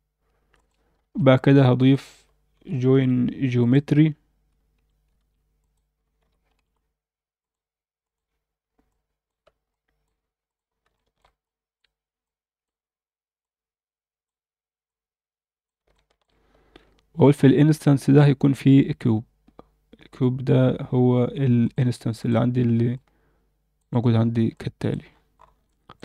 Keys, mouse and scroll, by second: 1.0 shift+a, 5.2 shift+a, 8.9 click, 9.7 click, 10.4 click, 10.7 scroll down 1, 10.9 alt+shift+middle click, 11.4 click, 12.2 click, 13.4-14.2 drag, 14.9-15.7 drag, 15.9 alt+shift+middle click, 18.1 shift+a, 22.9-23.8 drag, 24.2 scroll down 1, 24.5-24.9 alt+middle drag, 25.0-25.5 scroll up 4, 25.7-26.0 alt+shift+middle drag.